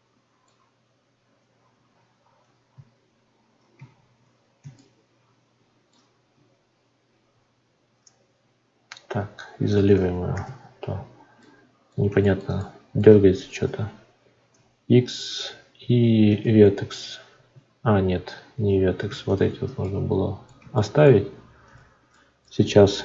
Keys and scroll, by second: 2.7 z, 17.5 ctrl+z.